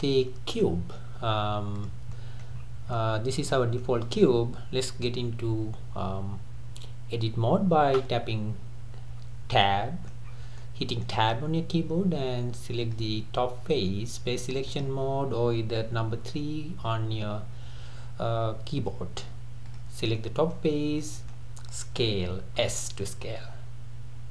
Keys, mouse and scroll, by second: 1.8 click, 2.1-2.6 middle drag, 2.6 scroll up 3, 3.0-5.3 middle drag, 5.3 Tab, 9.6-10.3 middle drag, 10.3-10.6 scroll up 2, 10.6-12.8 middle drag, 12.8 click, 14.7 click, 16.2 3, 19.7 click, 20.2-20.7 middle drag, 20.7-21.0 scroll down 2, 21.0-22.6 middle drag, 22.6 s.